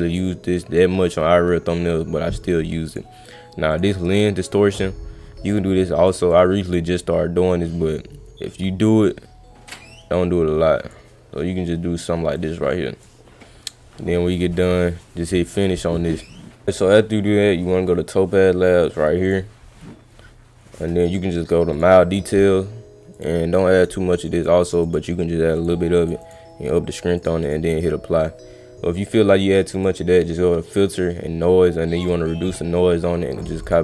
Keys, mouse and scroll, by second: 2.9 click, 3.7 click, 5.6 click, 6.3 click, 7.5-10.9 drag, 12.3 click, 14.5 click, 15.5 click, 19.2 click, 21.7 click, 23.1 click, 23.8 click, 24.3 click, 24.6 click, 24.8 click, 25.6 click, 25.9 click, 26.2 click, 27.2 click, 27.4 click, 29.7 click, 31.9 click, 33.4 click, 33.6 click.